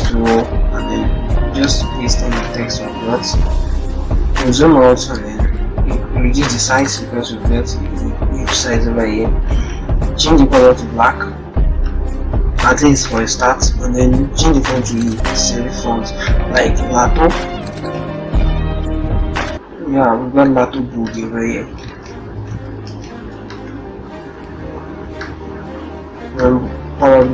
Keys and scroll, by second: 1.2 ctrl+v, 1.8 ctrl+Return, 3.0 ctrl+0, 4.9 ctrl+t, 8.8 ctrl+Return, 21.8 ctrl+Return.